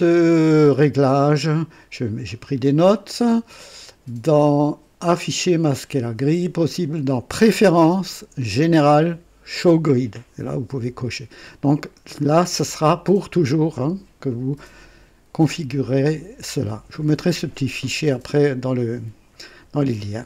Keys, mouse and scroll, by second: 2.3 click.